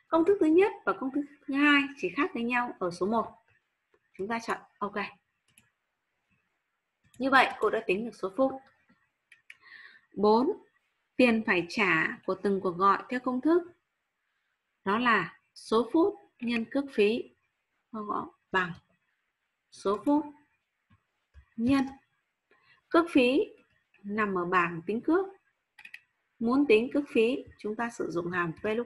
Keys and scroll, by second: 21.6 shift+8.